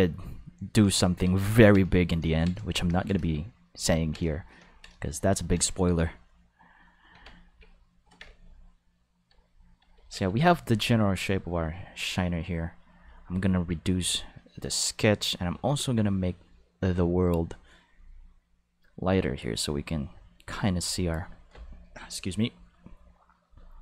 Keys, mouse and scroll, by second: 3.6 shift+middle click, 3.8 ctrl+middle click, 4.2 shift+middle click, 4.6 ctrl+middle click, 4.9 shift+middle click, 7.1 Tab, 9.9 ctrl+s, 10.2 Tab, 12.9 click, 13.8-15.4 drag, 17.1 click, 17.8 click, 18.7-20.1 drag, 22.6 click, 23.4 click.